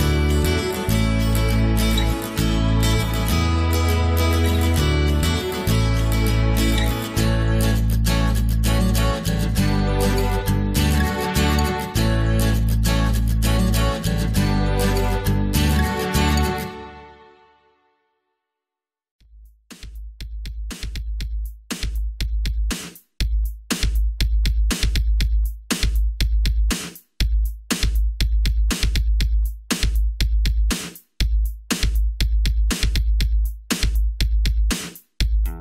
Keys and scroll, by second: 22.5 Delete, 23.5 ctrl+c, 23.7 ctrl+v.